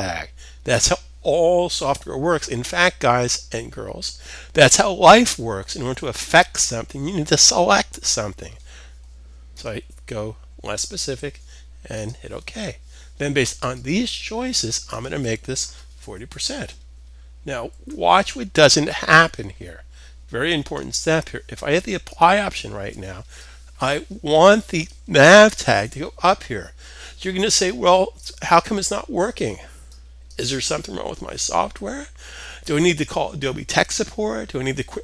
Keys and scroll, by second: 15.5-15.8 typing, 17.1 shift+5, 18.5-19.0 typing.